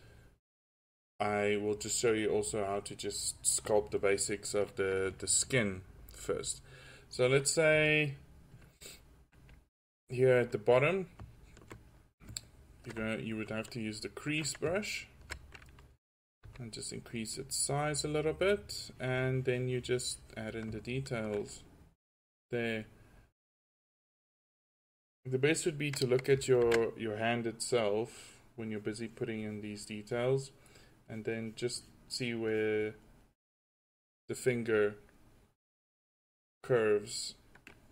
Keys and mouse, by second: 0.3-0.9 drag, 2.3-5.6 middle drag, 7.7 f, 8.5-8.9 drag, 16.5 f, 21.7-22.9 drag, 26.7 ctrl+z, 33.0-33.4 drag, 33.4-34.2 middle drag, 36.8-37.2 drag.